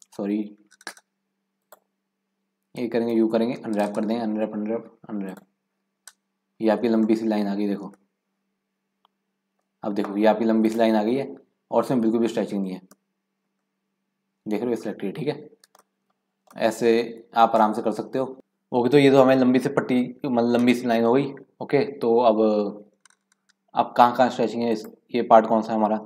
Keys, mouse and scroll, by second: 1.6 click, 2.6 a, 3.1 u, 6.1-6.6 scroll down 3, 6.6 scroll up 1, 7.1 shift+middle click, 7.4-7.9 scroll up 9, 7.9-10.7 shift+middle drag, 10.7-12.4 drag, 12.4-12.9 scroll down 4, 12.9 middle click, 13.4 scroll up 4, 13.6-15.0 middle drag, 15.0-16.0 scroll down 7, 16.0 shift+middle click, 16.1 shift+scroll up 1, 16.3 scroll down 1, 16.5 shift+middle click, 16.9 shift+scroll down 1, 17.0-17.7 scroll up 1, 17.7 shift+middle click, 23.7-24.1 scroll down 2, 24.1 scroll up 1, 24.7 click.